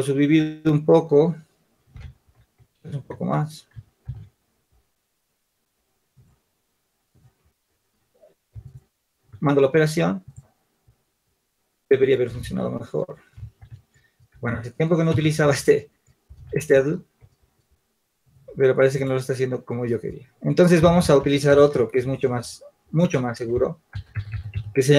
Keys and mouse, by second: 2.1 ctrl+z, 3.9 ctrl+r, 9.3 Tab, 9.3-13.3 drag, 12.9 ctrl+z, 13.3 ctrl+z, 14.2 Tab, 17.3 ctrl+z.